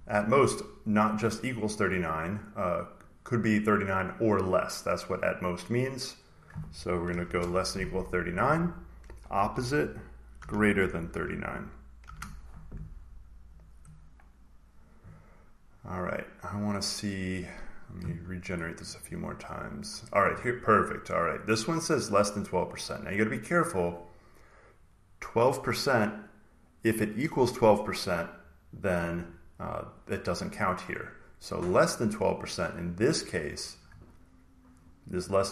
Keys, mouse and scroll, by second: 2.9-5.0 drag, 6.2 click, 7.1 <, 8.3 click, 9.2-10.9 typing, 11.9 shift+5, 13.5 click, 17.4-18.4 scroll down 2, 17.7 middle click, 18.7 click, 19.0 click, 22.4-24.5 drag, 29.7 click, 32.4-34.3 drag.